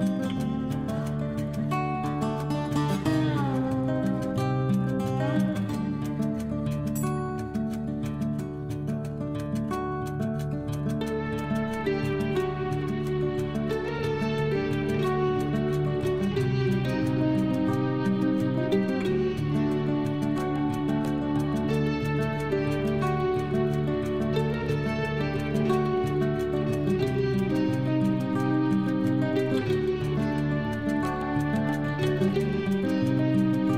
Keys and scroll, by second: 0.6 Up, 2.5 Left, 4.7 Up, 8.8 Down, 12.1 Down, 25.5 ctrl+z.